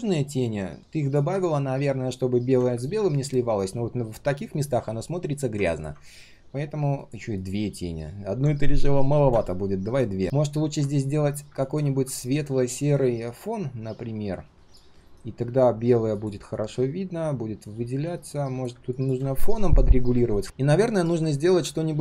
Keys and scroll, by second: 15.0 ctrl+shift+[.